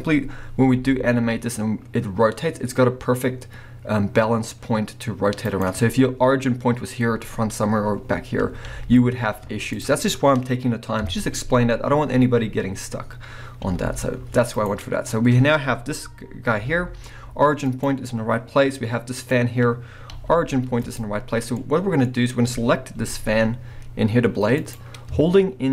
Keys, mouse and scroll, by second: 0.6 r, 5.6 right click, 5.8 scroll up 1, 5.9-9.2 middle drag, 8.7 r, 9.8 right click, 11.0 KP_1, 12.9-13.6 scroll down 1, 13.6 r, 14.6 right click, 16.6 g, 17.9 right click, 19.2 click, 20.1 g, 21.0 right click, 21.5-24.7 middle drag, 23.0 g, 24.7 right click.